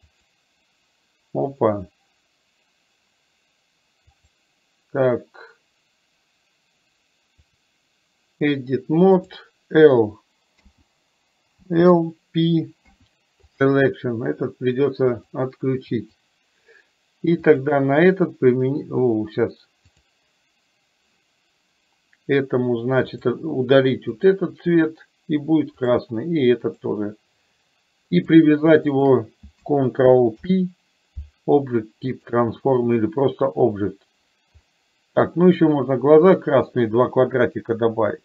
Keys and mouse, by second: 0.2 click, 4.2-7.8 drag, 9.3 click, 12.9 p, 15.2-16.3 drag, 17.7 click, 20.0-21.2 drag, 24.2 click, 26.7 click, 28.2 click, 28.9 shift+click, 30.4 ctrl+p, 34.7-35.3 middle drag.